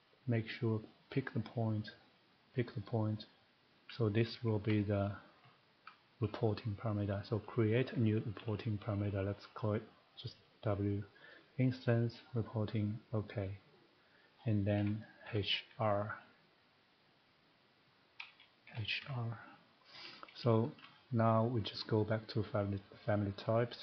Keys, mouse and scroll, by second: 1.1 click, 2.6 click, 4.3 Escape, 4.6 Escape, 5.0 click, 6.2 click, 8.4 w, 11.2 click, 12.3 click, 13.1 click, 14.3-15.1 scroll, 15.2-15.6 typing, 18.0 click, 18.7-19.0 typing, 19.3 scroll, 20.0 scroll, 20.8 shift+middle click, 20.9 scroll, 21.6 middle click, 22.4 click.